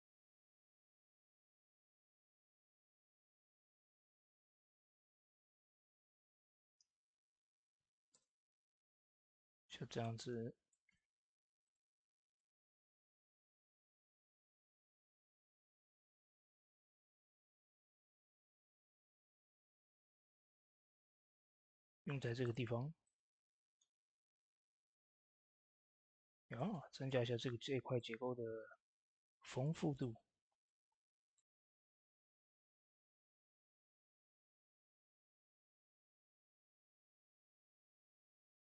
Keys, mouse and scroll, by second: 0.3 s, 1.0 s, 2.2 s, 5.7 s, 5.8 shift+space, 6.6 ctrl+space, 8.2 s, 9.1 click, 9.8 middle click, 10.3 scroll up 1, 10.6 shift+middle click, 11.0 s, 11.5 click, 13.5 ctrl+z, 14.9 shift+space, 18.7 ctrl+space, 20.2-22.9 drag, 22.9 middle click, 23.8 scroll up 1, 24.5 click, 25.2 middle click, 26.9-28.8 drag, 28.8 Tab, 29.5-38.5 drag, 38.6-38.7 drag.